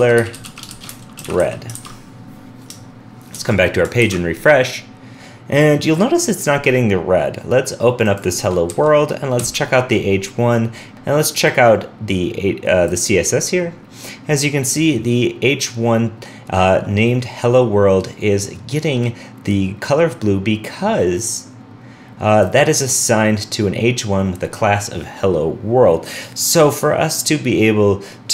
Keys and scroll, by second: 1.7 super+s, 3.3 super+s, 3.3 super+Tab, 4.0 super+r.